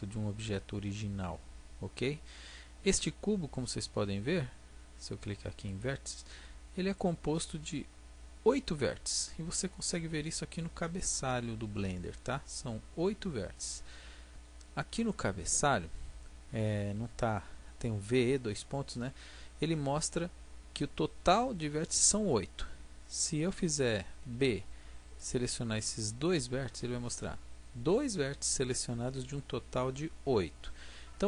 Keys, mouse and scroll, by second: 4.1-5.7 middle drag, 5.7-8.3 drag, 24.2 b.